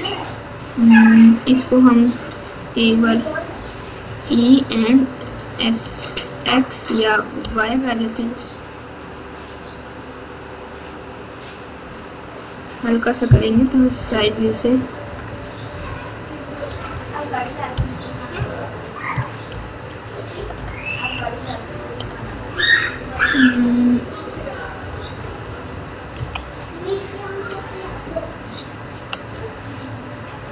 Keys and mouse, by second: 3.5 e, 5.2 s, 13.5 KP_4, 13.7 KP_4, 13.9 KP_4, 15.0 KP_Add, 15.2 KP_Add, 16.6 KP_Subtract, 16.8 KP_Subtract, 18.0 KP_Add, 18.3 KP_Add, 19.5 ctrl+KP_4, 20.3 ctrl+KP_8, 20.5 ctrl+KP_8, 21.9 ctrl+KP_8, 22.1 ctrl+KP_8, 22.3 ctrl+KP_8, 25.1 KP_8, 26.1 KP_2, 27.8 ctrl+KP_8, 28.0 ctrl+KP_8, 28.2 ctrl+KP_8.